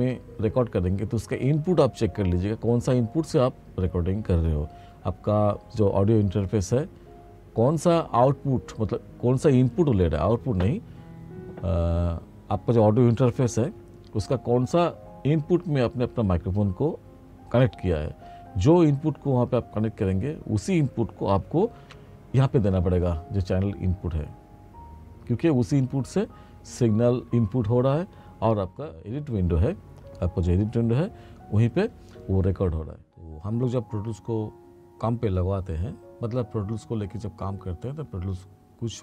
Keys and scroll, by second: 21.9 ctrl+=.